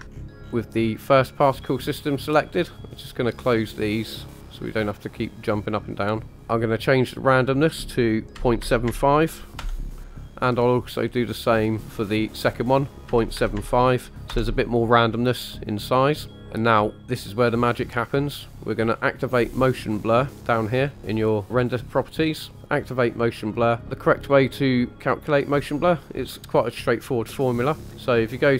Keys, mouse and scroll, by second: 0.0-1.1 scroll up 8, 1.8-3.6 drag, 4.3 click, 5.6 click, 6.3-9.6 drag, 11.2-14.4 drag, 18.2 click, 18.9-19.5 scroll down 1, 19.5-20.9 scroll down 4, 22.6 click, 22.6 scroll down 4, 23.2 click, 27.8 click.